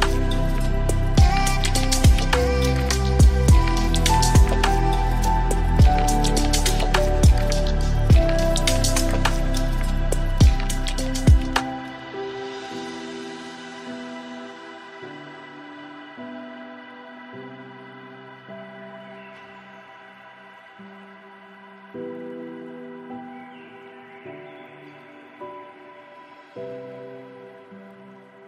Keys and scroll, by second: 2.7 ctrl+alt+s, 9.9 ctrl+alt+s.